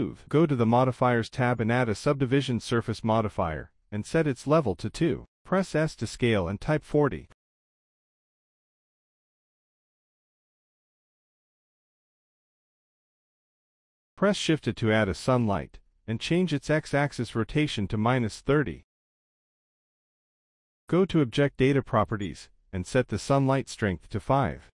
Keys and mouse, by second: 0.7-1.8 drag, 2.9 click, 3.3-3.8 drag, 3.8 z, 5.4 click, 6.6 s, 8.6 middle click, 8.9 z, 9.4-10.0 middle drag, 11.7 middle click, 12.7 shift+a, 15.4 g, 16.5 z, 18.5 middle drag, 19.5-20.7 drag.